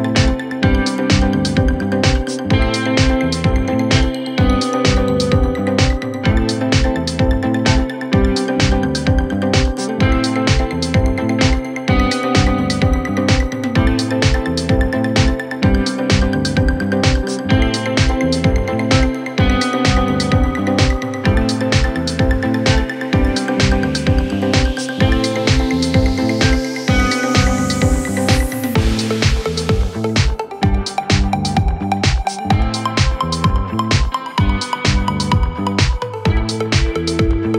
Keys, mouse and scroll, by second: 8.6 Return.